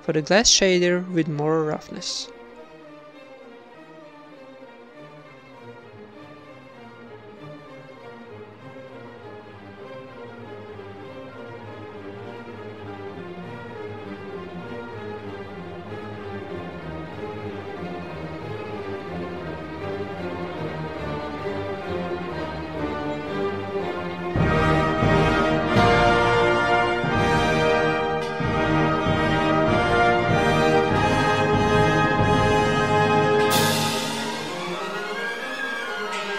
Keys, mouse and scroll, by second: 0.1 click, 0.5 click, 2.0 click, 3.1 click, 5.1 click, 5.4 shift+d, 7.5 click, 7.5 right click, 8.0 click, 8.0 right click, 8.9 middle click, 9.3-10.3 drag, 10.3 middle click, 11.0 click, 11.3 right click, 11.7 middle click, 11.9 click, 11.9 right click, 13.2 middle click, 13.6 click, 13.6 right click, 14.4 click, 15.0 drag, 15.0 right drag, 17.7 drag, 17.7 right drag, 17.8 g, 18.4-18.9 right drag, 18.4 g, 19.0 ctrl+s, 19.0 click, 19.0 right click, 23.0-23.4 middle drag, 23.4-24.4 drag, 23.9 shift+d, 30.0 ctrl+s, 30.3 shift+b, 32.0 ctrl+s, 35.6 middle click, 36.2 click.